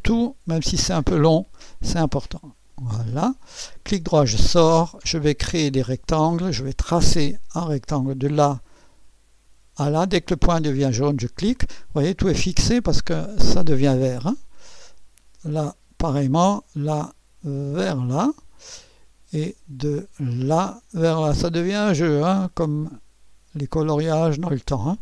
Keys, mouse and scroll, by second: 1.0 click, 2.7 click, 3.9 right click, 5.7 click, 8.0 click, 10.5 click, 16.0 click, 17.7 click, 20.4 click, 23.5 click.